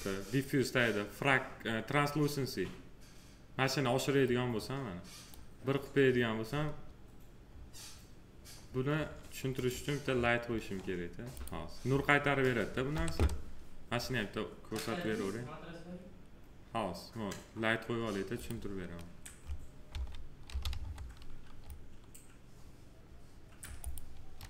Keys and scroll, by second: 12.8 t, 19.8 s.